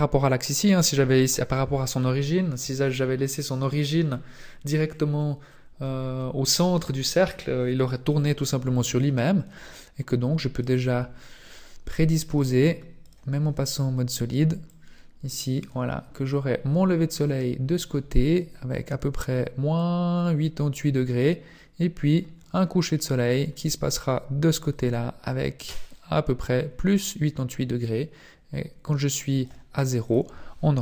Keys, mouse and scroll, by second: 8.7 click, 12.3 click, 14.7 click, 14.8 click, 30.0 click.